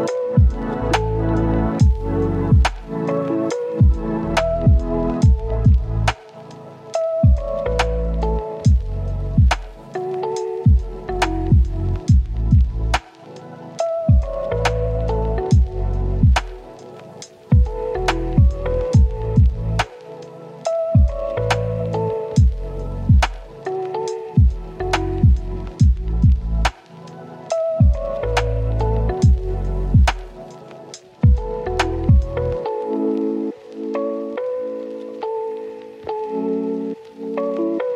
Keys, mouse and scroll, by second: 2.9-4.1 scroll up 1, 4.1 click, 4.9 scroll down 1, 5.0-5.9 scroll up 1, 5.9-8.1 drag, 8.7 scroll down 1, 8.8 scroll up 1, 9.0 click, 9.2 right click, 10.0 scroll up 1, 10.5 click, 13.3-13.6 scroll up 1, 13.6-15.6 drag, 16.0 right click, 16.3 click, 16.5 scroll down 1, 16.6 scroll up 1, 16.7-21.1 right drag, 21.2-21.8 scroll up 2, 21.2 right click, 21.8 right click, 22.9 scroll down 1, 23.0 scroll up 1, 23.1 right click, 23.8 click, 27.6-29.0 right drag, 29.0 scroll down 1, 29.1-29.4 scroll up 1, 30.5 right click, 30.8-31.4 scroll up 1, 31.4 click, 33.0 scroll down 1, 33.2 scroll up 1, 33.4 click, 33.9 right click, 34.2 scroll down 1, 34.3 scroll up 1, 34.4 right click, 35.1-35.4 scroll up 1, 36.0 scroll down 1, 36.1 scroll up 1, 36.2-37.9 right drag.